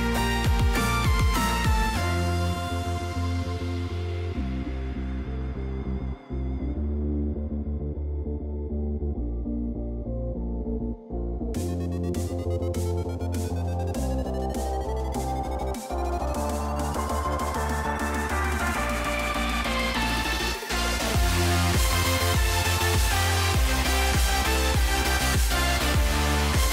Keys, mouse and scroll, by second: 0.5 g, 4.8 r, 6.9 s, 8.0 shift+middle click, 8.4 shift+middle click, 8.9 shift+middle click, 11.1 click, 12.6 click, 13.1 click, 14.4 g, 16.8 click, 18.0 g, 19.8 click, 20.8 g, 22.3 click, 23.3 g, 26.5 right click.